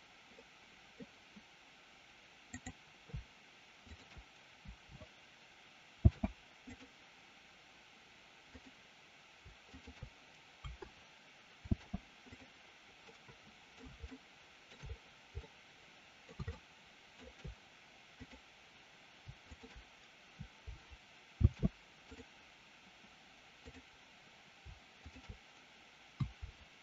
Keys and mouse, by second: 0.4 middle click, 2.5-3.1 drag, 3.8 shift+click, 5.9 ctrl+shift+c, 8.5 click, 9.8 shift+click, 11.6 ctrl+shift+c, 13.1-13.8 middle drag, 14.0-14.8 shift+middle drag, 15.4-16.2 middle drag, 16.5-17.1 shift+middle drag, 18.1-18.9 drag, 19.5 shift+click, 21.2 ctrl+shift+c, 23.5-24.2 drag, 25.0 shift+click.